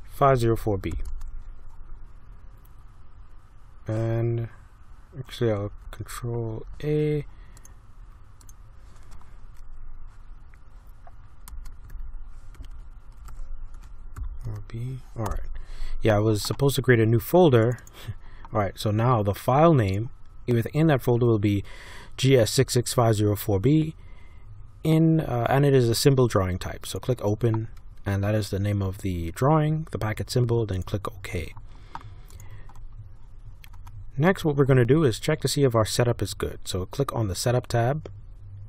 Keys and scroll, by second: 0.0-1.4 typing, 5.6 ctrl+a, 11.5-14.2 typing, 14.4 Caps_Lock, 15.2 Return.